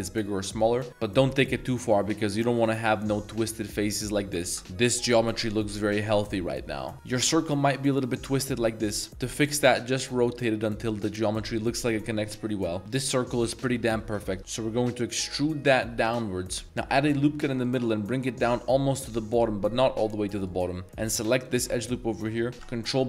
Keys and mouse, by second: 2.6 click, 3.0 shift+middle click, 4.5 ctrl+z, 6.9 r, 7.1 r, 9.3 r, 10.9-11.3 drag, 12.7 s, 12.8 s, 13.4 click, 14.1 middle click, 15.4 e, 16.6 ctrl+r, 17.0 ctrl+r, 20.4 click, 20.8 2, 21.3 alt+click, 22.0 middle drag, 22.6 ctrl+b.